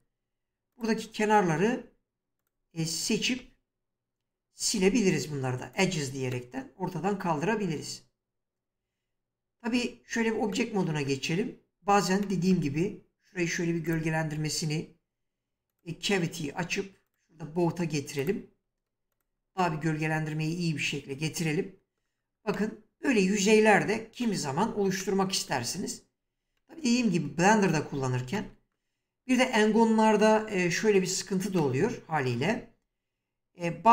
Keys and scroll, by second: 4.8 x, 9.8 Tab.